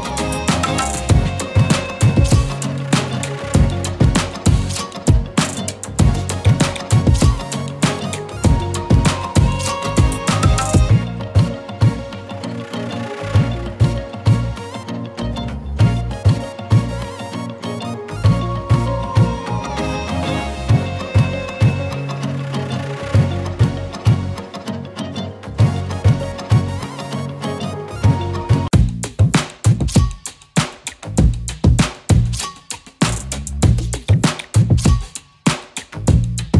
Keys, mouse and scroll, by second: 1.4 ctrl+click, 2.6 ctrl+v, 4.9 click, 9.2 shift+click, 11.1 shift+Up, 12.7 ctrl+z, 14.9 ctrl+z, 16.3 ctrl+f, 18.6 click, 21.9 scroll up 1, 22.2 z, 22.3 click, 23.6 space, 23.7 click, 26.9 click, 27.3 ctrl+f, 29.1 shift+click, 31.7 right click, 32.5 click, 33.8-35.7 alt+drag.